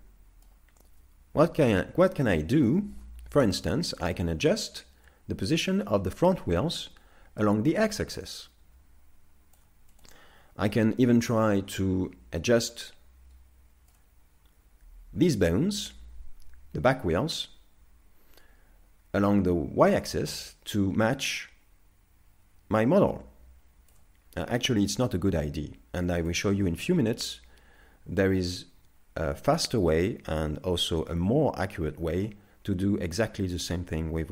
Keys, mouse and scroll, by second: 0.0 middle click, 3.3 scroll, 26.3 click.